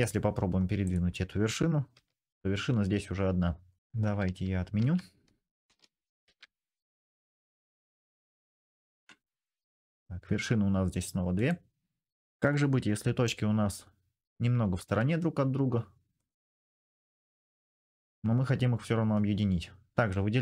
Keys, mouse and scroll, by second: 0.6 click, 1.7 g, 4.0 ctrl+z, 4.6 ctrl+z, 5.4 ctrl+z, 6.0 ctrl+z, 8.2 ctrl+z, 10.0 g, 14.6 g, 16.8 click, 18.1 middle click, 18.4 click, 18.6-20.0 middle drag, 20.0-20.4 drag.